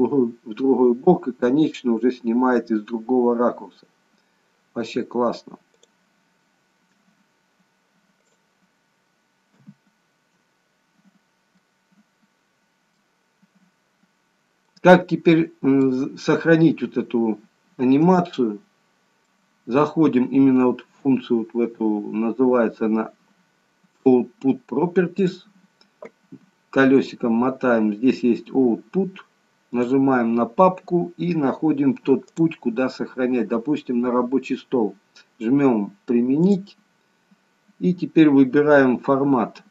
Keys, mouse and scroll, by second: 5.7 click, 6.3 KP_0, 8.4 click, 9.6 KP_0, 11.1-11.7 scroll up 3, 11.7 middle click, 14.3-14.7 scroll down 1, 14.7 middle click, 16.7-17.4 scroll up 1, 18.4 shift+middle click, 25.2 click, 26.4-28.2 scroll down 5, 29.8 click.